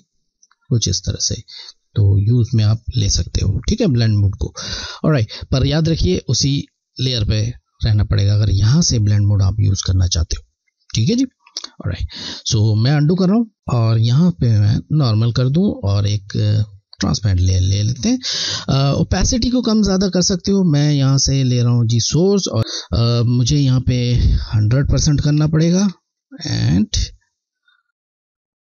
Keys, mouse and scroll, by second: 0.1 click, 1.6-3.6 alt+scroll down 1, 5.0-5.4 alt+scroll down 1, 10.8-11.1 alt+scroll down 1, 11.1 ctrl+z, 14.0 click, 19.9 click, 20.0 scroll, 22.1 alt+click, 22.6 ctrl+z, 24.1 click.